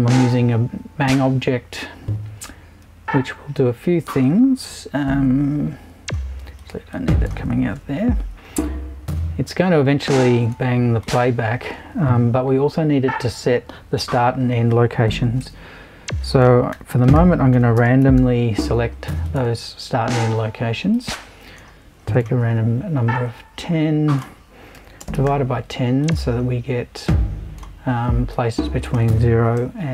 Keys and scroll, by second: 2.8 super+i, 7.7 BackSpace, 15.4 super+i, 16.5-18.7 typing, 23.3 super+i, 24.5-25.7 typing, 29.6 Right.